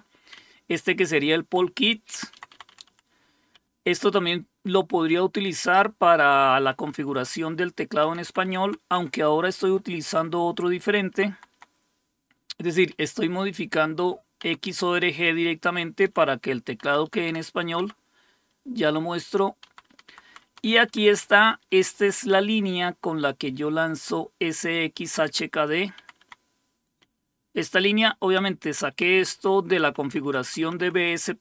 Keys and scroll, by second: 0.4 Right, 1.0 Right, 1.1 Right, 2.1 Down, 2.5 Down, 2.7 Down, 3.6 Up, 3.7 typing, 4.3 Left, 4.9-5.3 Left, 6.2 Right, 6.4 Right, 6.6 Right, 6.8 Right, 8.1 Down, 8.3 Down, 8.4 Down, 8.7 Down, 9.0 Up, 9.7 Up, 11.1 Down, 11.4 Down, 13.2 Up, 13.2-15.0 typing, 16.1-17.1 typing, 17.3 Down, 19.7 Down, 19.9 Down, 20.3 Down, 20.5 Down, 20.7 Down, 21.3 Up, 21.5 Up, 21.6 Up, 21.9 Up, 23.6 Up, 25.1 Left, 25.3 Left, 26.1 Down, 26.3 Down, 27.3 Right, 27.9-28.3 Right, 28.7 Right, 29.0 Right, 29.2 Right, 29.6 Right, 30.4 Right, 30.9 Right, 31.1 Right, 31.3 Right.